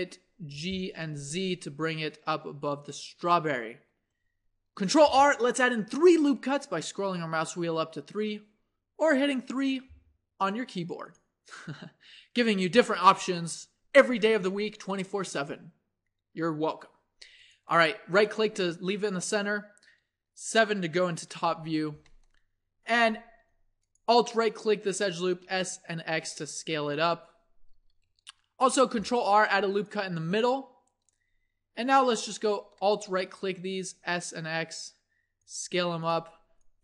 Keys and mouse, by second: 0.5 g, 5.0 ctrl+r, 21.4 KP_7, 23.0 a, 25.2 s, 27.7 a, 28.8 ctrl+r, 33.3 click, 33.3 s, 36.0 click.